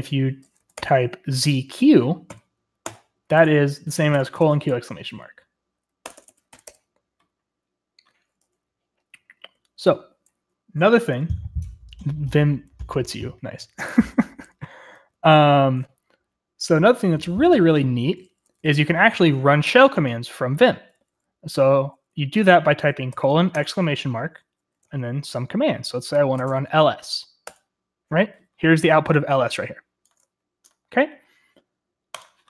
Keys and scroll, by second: 0.5 Up, 0.7 Return, 2.2-2.8 typing, 3.8-6.6 typing, 9.4-9.9 typing, 13.5-15.8 typing, 16.9-17.7 k, 23.5 typing, 24.8 typing, 26.1-27.4 typing.